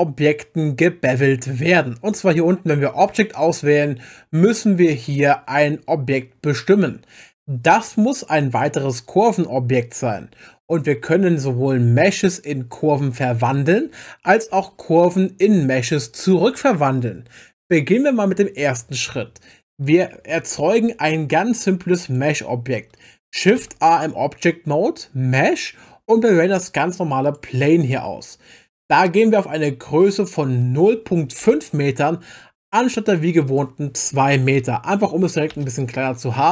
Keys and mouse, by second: 2.1 click, 22.0 click, 23.6 shift+a, 30.2-31.4 drag, 33.5-35.5 drag.